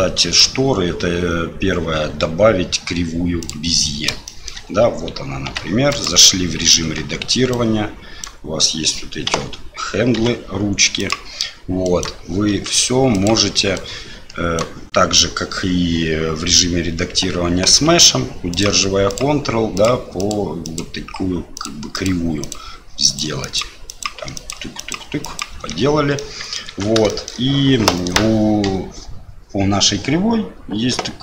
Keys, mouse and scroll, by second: 0.2 shift+a, 4.3 shift+click, 5.5 g, 6.8 Tab, 7.5 click, 9.3 a, 10.1 s, 11.8 click, 12.5 s, 13.7 click, 14.6 right click, 18.5 ctrl+click, 19.0 ctrl+click, 19.8 ctrl+click, 20.6 ctrl+click, 21.5 ctrl+click, 21.9 ctrl+click, 22.5 ctrl+click, 23.0 ctrl+click, 23.8 ctrl+click, 24.7 ctrl+click, 25.2 ctrl+click, 26.1 middle click, 26.6 Tab, 27.0 shift+middle click.